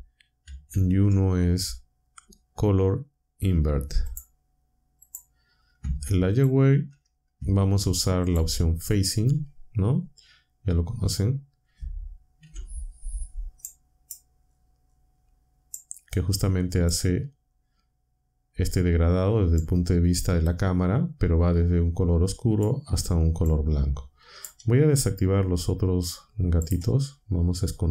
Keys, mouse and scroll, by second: 0.7 shift+a, 4.0 click, 5.0 click, 6.3 ctrl+shift+click, 8.2 ctrl+shift+click, 12.4 1, 13.6 click, 15.7-17.0 drag, 19.5-22.8 drag, 23.4-24.6 drag, 25.6 z, 26.6 click.